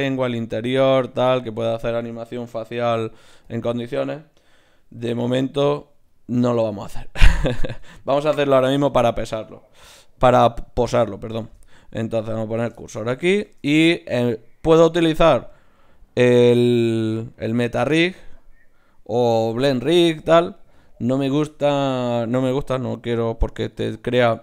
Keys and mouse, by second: 0.3-2.9 drag, 2.9 ., 5.4 ctrl+z, 5.7 ctrl+z, 7.1 KP_1, 10.3 shift+a, 11.4 shift+s, 13.5 shift+a.